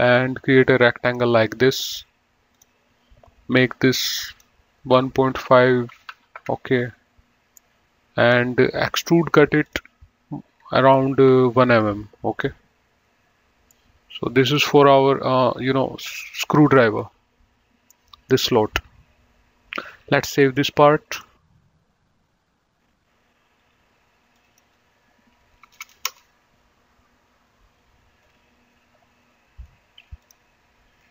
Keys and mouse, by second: 0.3 click, 2.8 click, 6.1 KP_1, 6.3 KP_Decimal, 6.4 KP_5, 6.7 KP_Enter, 7.9 middle click, 10.0 click, 11.5 KP_1, 12.0 KP_Enter, 14.1 middle click, 18.1 middle click, 20.6 click, 23.8 click, 25.9 BackSpace, 26.2 Return, 30.5 click.